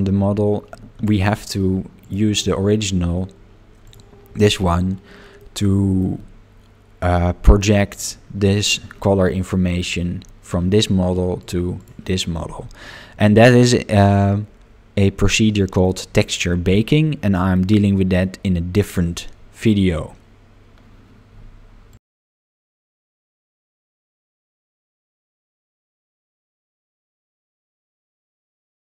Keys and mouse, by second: 2.0 click, 2.3 click, 5.4 middle click, 11.4 click, 11.8 click, 15.9-17.5 middle drag.